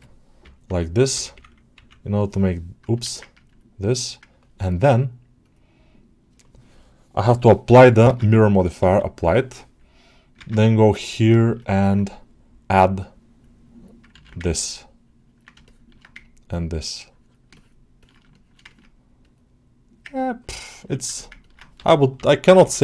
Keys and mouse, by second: 3.3 ctrl+click, 8.0 ctrl+Tab, 10.4 ctrl+Tab, 11.5 ctrl+alt+middle click, 13.3 click, 14.1 ctrl+z, 14.3-15.3 drag, 15.5 middle click, 16.4 click, 17.4 ctrl+alt+middle click, 17.9 ctrl+alt+middle click, 18.2 alt+shift+middle click, 18.6 ctrl+alt+middle click, 19.1 middle click, 20.0-21.1 ctrl+alt+middle drag, 21.3 ctrl+alt+middle click.